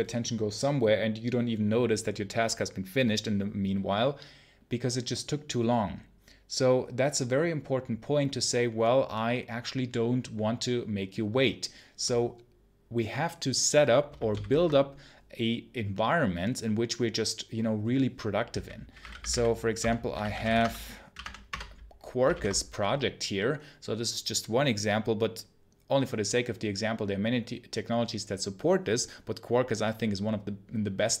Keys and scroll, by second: 20.5 Tab, 21.1 Tab, 21.4 Return.